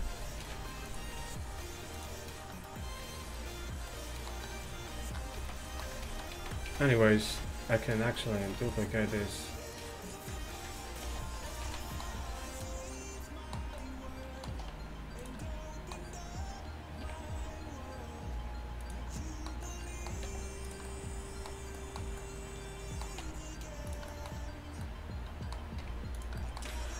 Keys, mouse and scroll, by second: 0.5 ctrl+v, 5.4 z, 6.1 ctrl+z, 6.4 ctrl+z, 7.3 z, 10.5 click, 11.1 shift+d, 11.7 z, 14.7 r, 17.1 r, 20.3 g, 23.3 r, 25.9 r, 26.8 g.